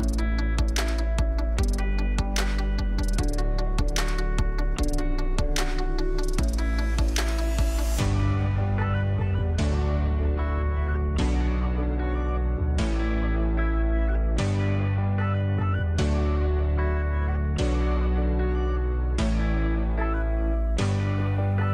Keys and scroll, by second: 5.8 ctrl+alt+d, 9.1 ctrl+u, 12.7 ctrl+d, 13.0 space.